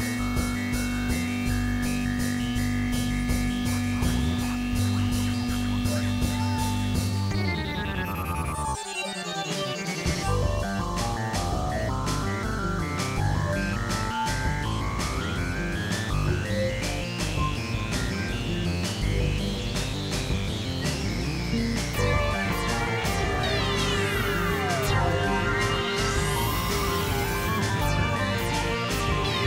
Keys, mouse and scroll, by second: 2.0 x, 2.5 click, 3.2 alt+click, 3.9 alt+click, 4.7 click, 5.4 click, 6.3-7.3 drag, 7.4 click, 7.9 click, 8.7 click, 9.2 click, 20.8 middle click, 22.0 KP_3, 22.8 middle click, 23.4 x, 24.0-25.7 drag, 25.4 x, 26.7 click, 27.6 click, 28.1 click, 29.2 click.